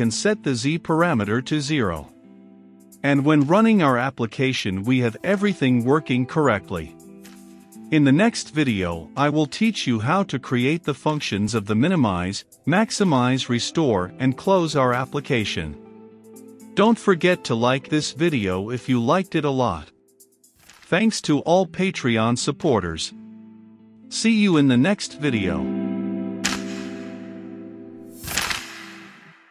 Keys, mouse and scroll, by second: 0.5 z, 3.5 click, 3.7 space, 4.2-19.4 drag.